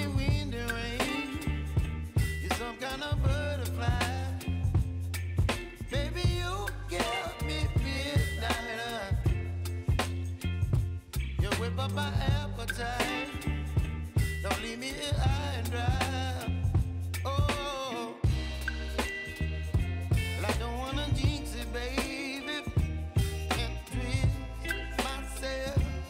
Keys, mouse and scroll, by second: 0.4 ctrl+c, 1.9 click, 3.2 ctrl+v, 4.9 click, 5.5 ctrl+v, 6.1 click, 6.7 ctrl+v, 8.5 ctrl+v, 10.8 click, 11.2 ctrl+d, 13.2 click, 14.7 ctrl+d, 16.4 click, 17.1 ctrl+v, 18.0 click, 18.3 ctrl+v, 19.6 click, 20.7 `, 21.2 `, 22.6 click, 24.7 ctrl+click.